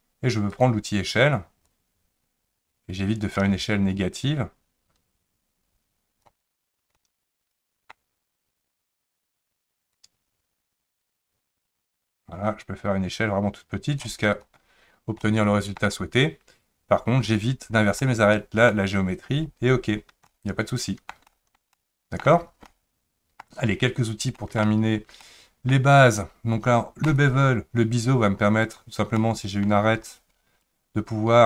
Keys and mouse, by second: 0.6 click, 1.8-6.3 drag, 7.0 middle click, 10.1-14.0 drag, 15.2 middle click, 18.0 middle click, 20.3 middle click, 21.3 shift+middle click, 21.7 middle click, 22.7 middle click, 24.4 shift+middle click, 25.2 middle click, 27.0 click, 28.6 click, 29.2 middle click, 30.7-31.4 drag.